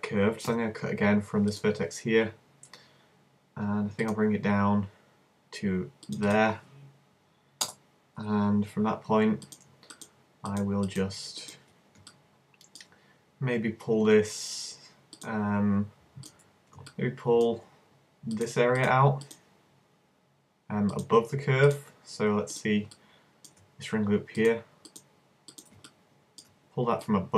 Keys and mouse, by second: 0.5 k, 9.5-13.0 right drag, 17.0 right click, 17.5-21.1 middle drag, 21.1-23.0 right drag, 23.0-27.3 middle drag, 27.0-27.3 drag, 27.0-27.3 right drag.